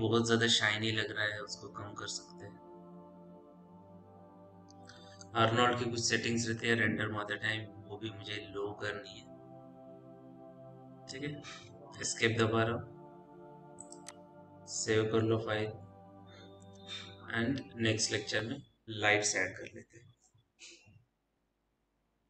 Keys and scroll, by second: 12.1 Escape, 15.9 ctrl+s, 16.3 Caps_Lock.